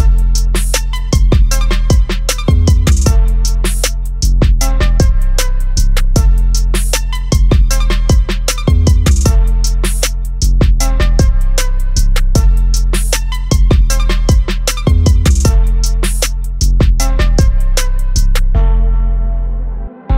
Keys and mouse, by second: 0.8 click, 4.0 click, 6.4 click, 13.4 click.